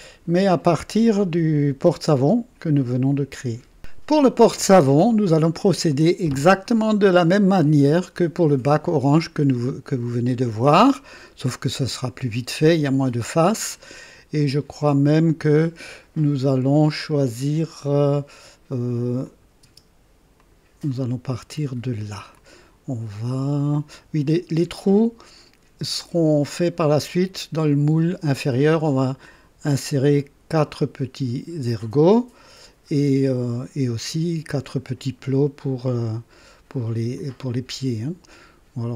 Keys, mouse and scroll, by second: 1.5 click, 2.7-3.6 drag, 6.9-18.1 drag, 19.2 click, 19.6 space, 20.4 click, 20.9-22.2 drag, 22.3-24.3 drag, 27.5-28.7 drag, 32.0 click, 37.1-38.2 drag.